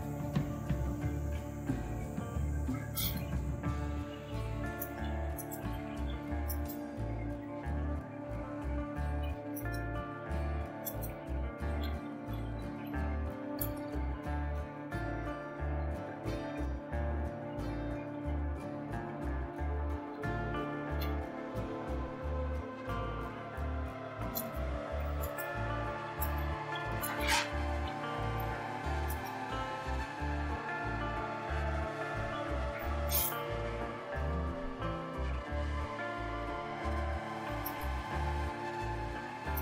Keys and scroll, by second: 0.2-13.6 typing, 14.9-21.0 typing, 22.5-29.1 typing, 32.0-37.8 typing, 39.5 typing.